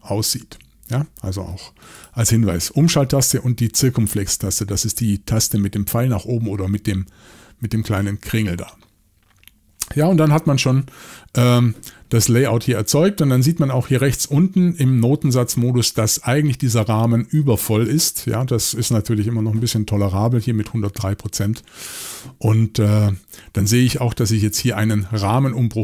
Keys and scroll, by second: 0.4 shift+o.